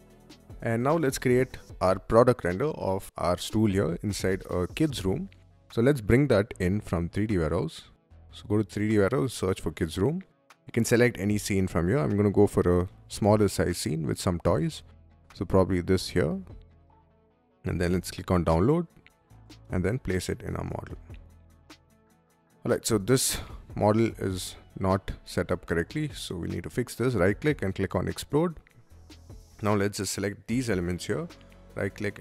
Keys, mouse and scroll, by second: 0.3 click, 3.2-4.9 middle drag, 7.2 click, 8.9 click, 15.6 click, 17.7 click, 19.4 click, 20.3 middle click, 20.7-21.7 scroll up 2, 21.7-23.9 middle drag, 23.9-24.4 scroll up 2, 24.7 space, 25.1 scroll up 2, 25.4 middle click, 27.6 click, 28.5 Delete, 28.6-29.4 drag, 30.2 middle click, 32.1 click.